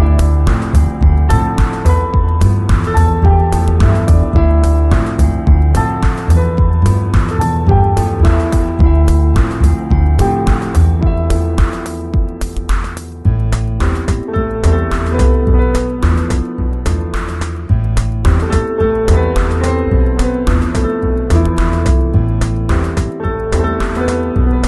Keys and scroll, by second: 0.0 space, 2.4 [, 4.4 z, 6.6 v, 11.2 super+-.